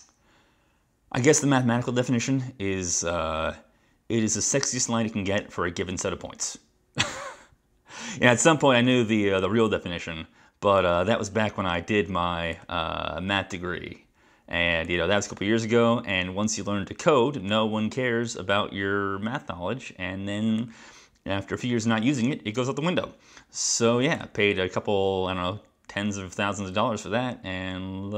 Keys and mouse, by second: 10.8 click, 12.6 click, 14.9 click, 20.6 click.